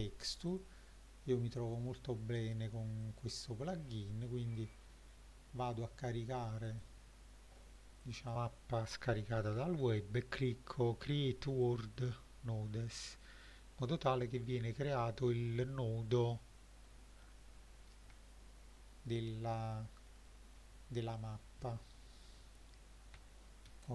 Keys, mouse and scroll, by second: 0.5-1.3 drag, 1.6 click, 3.0 click, 11.6 click, 16.9 middle click, 18.2-19.8 shift+middle drag, 20.1 middle drag, 20.6-21.2 scroll down 1, 21.2 click, 23.7 shift+a.